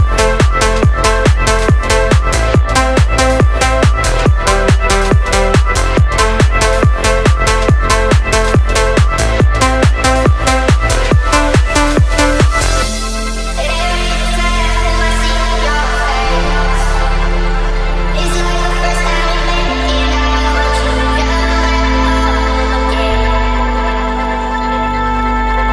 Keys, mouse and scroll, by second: 0.3-2.5 middle drag, 3.2 middle click, 3.7-4.9 drag, 5.5-6.1 drag, 8.3-10.5 drag, 11.6 click, 12.5 ctrl+a, 13.3-14.0 drag, 18.3 click, 20.9 click, 24.3 click, 25.0 shift+s.